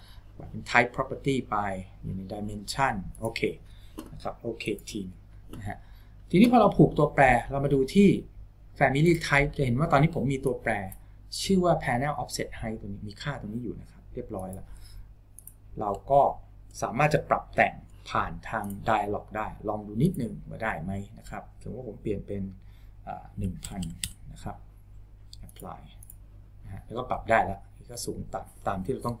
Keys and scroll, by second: 23.8 KP_0.